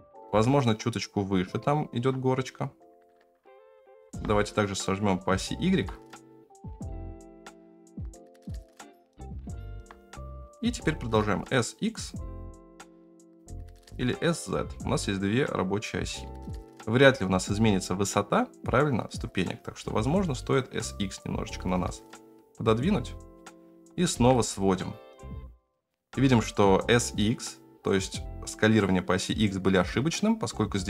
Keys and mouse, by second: 0.1 g, 3.6 s, 5.4-5.7 shift+middle drag, 9.4 s, 10.8 s, 13.7 s, 19.6 s, 23.7 s.